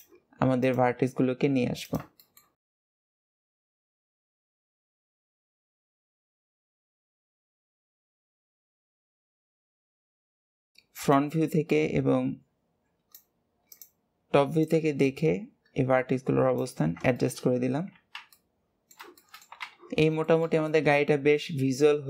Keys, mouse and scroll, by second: 0.4 click, 2.0-2.6 shift+middle drag, 2.6 click, 3.3 click, 4.0 shift+middle click, 4.1 shift+drag, 4.3 shift+drag, 4.8 click, 5.1 drag, 5.4 click, 6.0 shift+click, 6.5 shift+click, 6.8 shift+click, 7.7 click, 9.6 click, 10.3-10.6 shift+middle drag, 10.9 click, 13.5 click, 14.4 click, 16.9 shift+middle click, 17.5 scroll down 1, 18.1-19.5 middle drag, 19.5 Tab, 20.0-22.0 shift+middle drag.